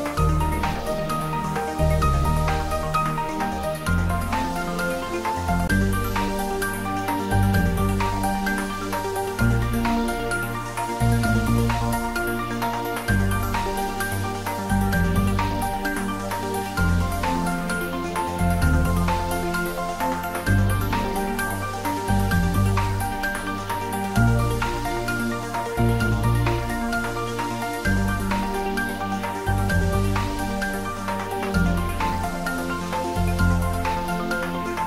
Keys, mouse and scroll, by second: 0.2-0.7 scroll down 2, 0.7 click, 1.2-2.2 scroll up 2, 2.2-3.4 scroll up 1, 3.4-3.9 scroll up 1, 3.9 click, 7.8 click, 10.0 click, 12.6-13.4 scroll up 1, 14.6 click, 19.3-19.7 scroll up 1, 19.7-20.3 middle drag, 21.1 right click, 22.1 click, 23.7-24.0 scroll down 1, 24.2-24.8 middle click, 25.0 click, 25.6 right click, 27.2 click, 28.1-28.6 scroll up 1, 28.6 right click, 29.5 click, 30.4 right click, 31.5 click, 32.1 right click, 32.7 click, 33.3-33.9 scroll down 1, 33.9 middle click, 34.4-34.7 scroll up 1.